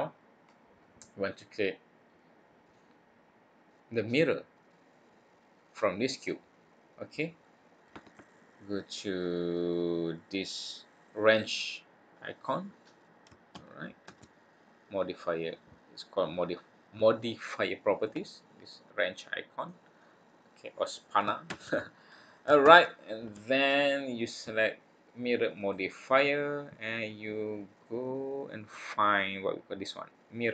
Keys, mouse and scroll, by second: 0.4 scroll down 1, 0.4-1.3 scroll down 5, 1.0-1.9 scroll up 2, 1.9-3.1 scroll up 2, 6.4-7.1 scroll down 1, 7.1-8.4 scroll down 2, 22.7 scroll down 3, 25.6 click, 27.7 click.